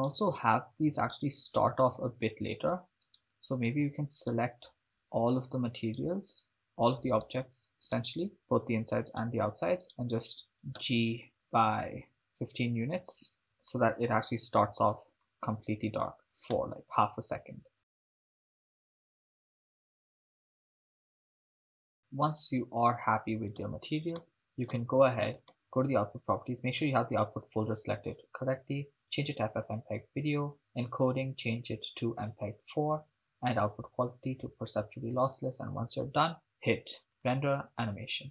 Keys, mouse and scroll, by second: 0.1 shift+right click, 1.1 shift+right click, 3.3 right click, 4.3 shift+right click, 6.0 shift+right click, 7.4 shift+right click, 8.0 shift+right click, 9.3 shift+right click, 10.8 g, 13.3 click, 15.1 click, 16.2 drag, 17.9 shift+space, 19.3-19.7 shift+middle drag, 21.5 shift+space, 23.7 shift+space, 24.3 shift+space, 24.8 shift+space, 25.5 click, 25.5 shift+space, 26.3-28.0 scroll down 3, 28.0-29.4 drag, 29.8-30.6 scroll down 1, 30.6 click, 30.6-31.5 scroll down 2, 31.5-32.9 drag, 33.7-35.4 drag, 37.1-38.3 drag.